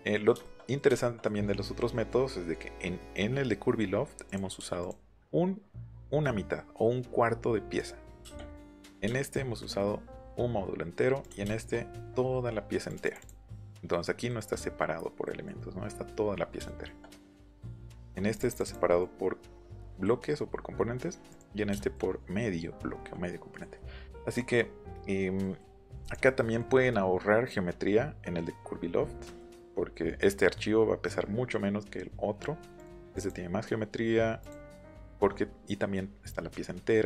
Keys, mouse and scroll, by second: 4.2 click, 4.5 m, 4.8-9.0 drag, 9.0 shift+middle click, 9.5 middle click, 11.2 click, 11.4 shift+middle click, 11.7 middle click, 12.8 click, 13.0 click, 13.1 click, 14.2 middle click, 15.2 middle click, 16.6 shift+middle click, 17.2 Escape, 17.4 middle click, 17.8 shift+middle click, 18.3 click, 18.6 click, 18.8 middle click, 21.2 click, 21.6 shift+middle click, 25.0 scroll down 1, 25.3 middle click, 26.0 click, 32.7 click, 33.0 click, 33.1 click, 34.3 click, 34.8 middle click.